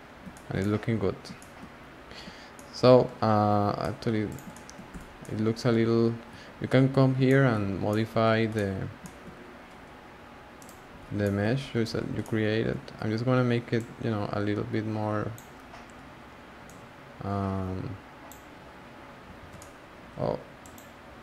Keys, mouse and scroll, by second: 1.7-2.5 scroll up 1, 2.5-4.2 shift+middle drag, 4.2 click, 4.5 shift+middle click, 4.9 Tab, 5.2-5.7 middle drag, 5.7 scroll down 1, 5.8-6.5 scroll up 1, 6.5 alt+z, 6.9-7.2 scroll down 2, 7.2-8.2 shift+middle drag, 8.2-8.5 scroll up 4, 8.5-9.3 middle drag, 9.3-10.5 scroll up 3, 10.5 click, 10.9 3, 11.2 shift+middle drag, 11.4-12.2 scroll up 8, 12.2-13.0 shift+middle drag, 13.0-13.7 scroll down 1, 13.7 click, 16.6 click, 19.4 alt+z, 19.6-20.6 middle drag, 20.6 click.